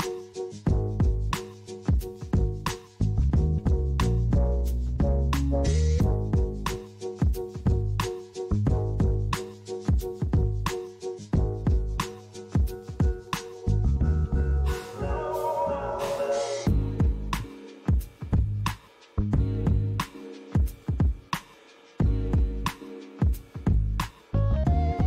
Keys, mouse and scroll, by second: 0.4 middle click, 1.3-2.1 scroll up 1, 2.1 middle click, 3.2 click, 3.9 middle click, 5.0 click, 5.9 click, 8.3 click, 8.8 middle click, 11.2 shift+a, 18.2 click, 21.7 click.